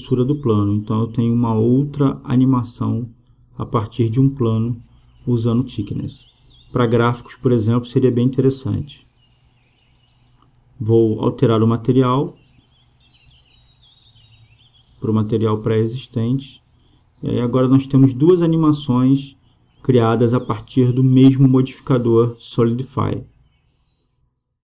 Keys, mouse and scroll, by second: 0.2-1.9 drag, 8.4-11.7 drag, 13.0-14.7 drag, 16.4-18.1 drag.